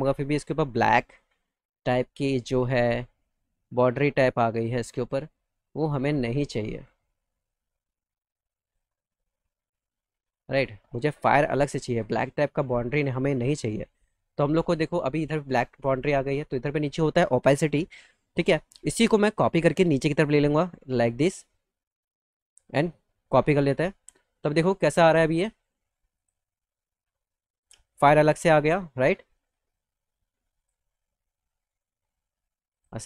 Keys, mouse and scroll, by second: 0.1 ctrl+z, 1.6 click, 3.0-4.9 drag, 6.5-8.6 drag, 8.9 middle click, 10.2-11.9 drag, 12.9 click, 13.4 click, 15.8 click, 19.4 click, 23.1 click, 26.0 click, 27.5 click, 30.4 click, 31.3 alt+middle click, 32.5 click.